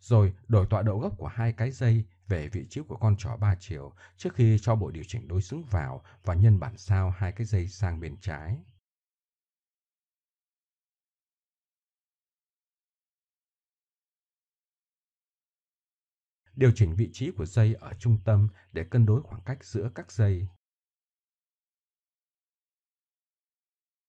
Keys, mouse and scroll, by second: 3.1 click, 3.6 middle click, 5.2-7.3 drag, 7.9 middle click, 8.4-10.0 middle drag, 10.1-11.1 middle drag, 12.1-14.8 middle drag, 15.1 KP_1, 17.4-19.6 drag, 18.3 Tab, 19.2 right click, 22.8 middle click, 22.9 Tab.